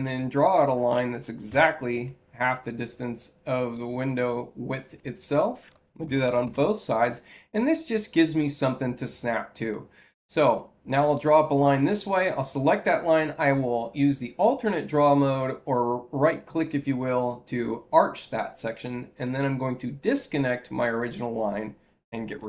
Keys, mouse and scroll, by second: 3.6-5.1 drag, 4.8 Return, 9.6-10.8 drag, 11.5 click, 12.9-17.0 drag, 19.1 click, 20.7 click.